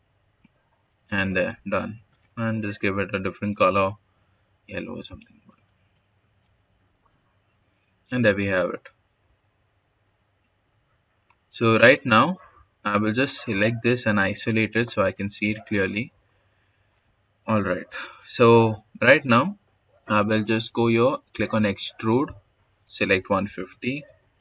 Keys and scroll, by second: 6.5 Escape, 23.1-24.4 typing.